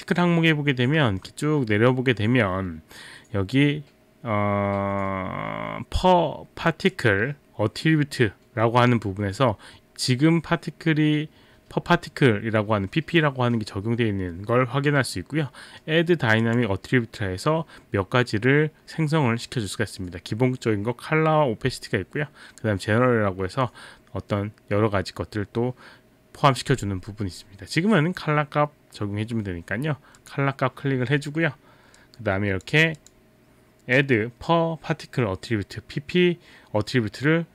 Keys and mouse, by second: 6.9 click, 16.4 click, 30.2 click, 32.0 click.